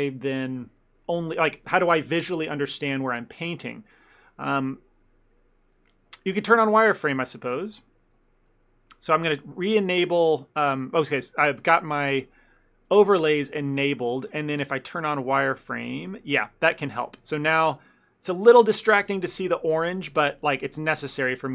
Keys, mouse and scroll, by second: 3.5 middle click, 3.9 middle click, 4.2 shift+middle click, 4.3 shift+middle click, 7.8 click, 8.6 click, 15.7 click, 16.8 middle click, 17.0 ctrl+middle click, 17.7 click, 18.0 click, 19.1 ctrl+z, 19.2 ctrl+z, 19.7 ctrl+z, 19.7 ctrl+click, 19.8 ctrl+click, 20.0 click, 20.5 click, 21.0 click.